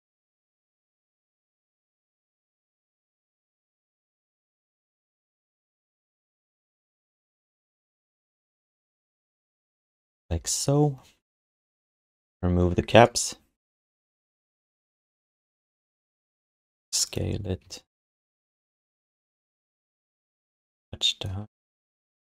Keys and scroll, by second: 0.0-2.7 typing, 7.1 space, 7.5 space, 12.0 q, 15.7 q, 17.1-20.1 typing, 21.9 q.